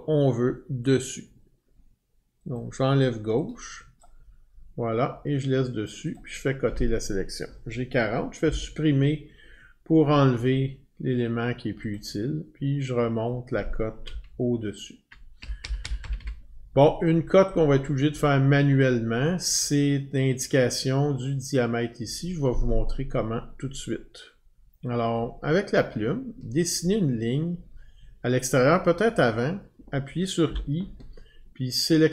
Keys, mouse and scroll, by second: 2.5 click, 4.0 click, 6.1 click, 8.4 Delete, 11.9 click, 13.3 click, 14.6-15.1 Up, 15.8 Up, 17.5 Up, 17.5 click, 25.1 click.